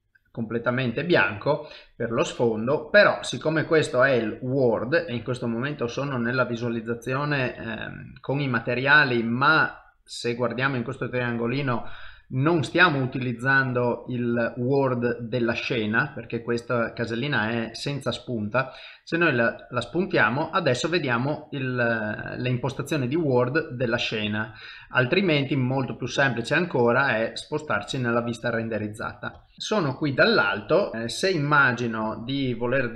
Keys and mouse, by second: 27.6 click, 28.9 middle click, 29.5 KP_7, 30.1 shift+middle click.